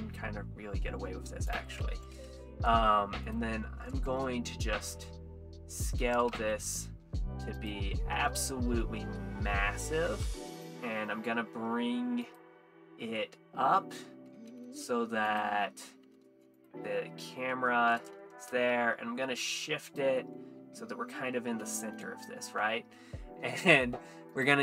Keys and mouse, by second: 1.5 click, 3.3 click, 4.2 s, 4.2 shift+z, 6.0 Escape, 6.3 s, 7.6 click, 8.3 middle drag, 9.2-9.7 middle drag, 10.7 g, 10.7 z, 12.3 click, 13.2-13.9 middle drag, 14.5 g, 14.7 z, 15.3 click, 16.4 g, 16.4 z, 16.6 click, 16.9 middle drag, 19.9 g, 19.9 shift+z, 20.2-21.5 middle drag, 24.3 click.